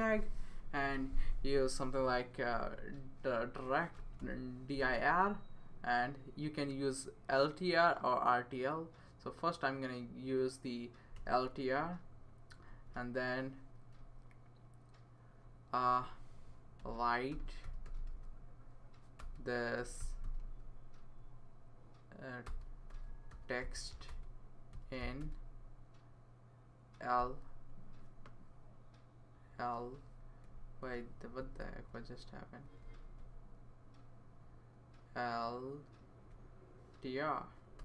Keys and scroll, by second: 2.8 Left, 3.7-4.7 typing, 4.8 Return, 11.2 Return, 12.6 Right, 12.9 Right, 16.5-21.0 typing, 22.4-25.2 typing, 27.2 typing, 31.1 Left, 31.4 Left, 31.6 Left, 32.4 Down, 32.8 Right, 33.7 Right, 34.2 Right, 35.9 Right, 37.5-37.8 typing.